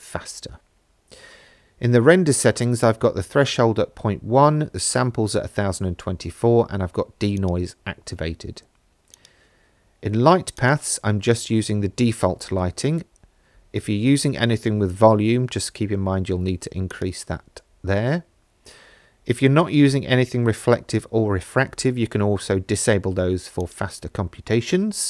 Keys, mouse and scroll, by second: 7.4 click, 9.1 click, 10.6-14.1 drag, 14.3-16.8 scroll down 9, 16.9 click, 19.9-22.0 scroll down 7, 22.4-22.9 scroll down 2, 23.6 click.